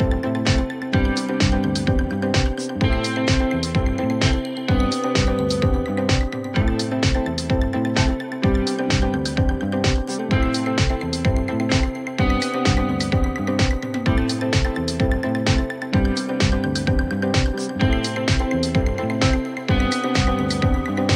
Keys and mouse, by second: 1.3 click, 2.2 click, 5.5 right click, 7.2 click, 9.9-10.6 alt+drag, 11.2-12.8 drag, 13.1 alt+middle drag, 13.4 alt+click, 15.0 right click, 18.3 right click, 19.6-21.1 right drag.